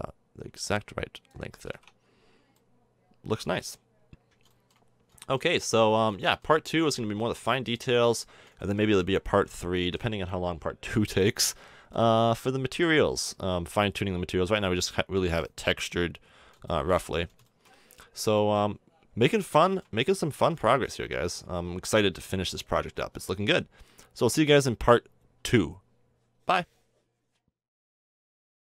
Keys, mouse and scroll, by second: 1.6 a, 1.7 Tab, 2.5 middle drag, 3.4 a, 13.7 KP_0, 14.9 middle click, 15.0-16.0 middle drag, 20.8 click, 21.6 g, 25.0-28.7 middle drag.